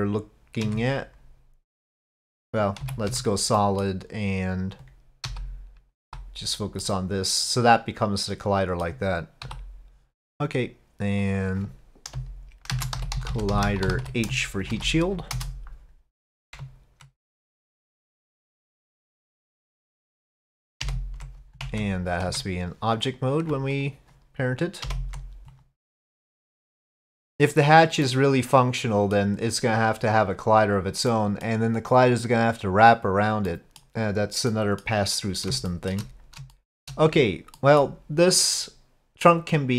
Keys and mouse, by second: 2.8 z, 3.6 click, 5.3 KP_Divide, 6.0 KP_Divide, 6.8-8.9 drag, 11.3-16.3 drag, 13.3 l, 17.6 click, 20.8 ctrl+p, 22.3 Tab, 23.1 click, 23.8 ctrl+click, 24.9 ctrl+p, 27.2 click, 28.1-29.2 middle drag, 31.1-31.5 middle drag, 33.5-33.8 middle drag, 34.5-34.8 middle drag, 35.7 shift+middle drag, 36.6-36.9 shift+middle drag, 37.6 middle drag, 39.3-39.7 middle drag.